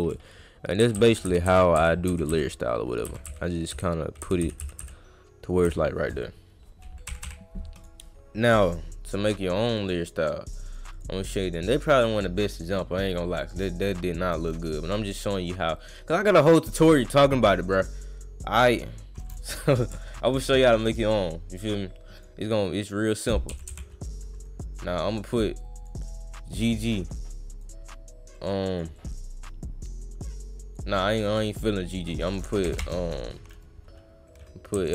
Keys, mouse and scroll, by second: 7.8 click, 9.7 click, 10.7 click, 10.9 click, 12.0 click, 12.6 click, 13.4 click, 17.8 click, 19.2 click, 20.8 click, 21.7 click, 22.2 click, 23.5 g, 23.7 g, 24.8 click, 25.7 click, 26.8 click, 27.3 click, 28.4 click, 28.9-30.7 drag, 31.2 click, 31.9 click.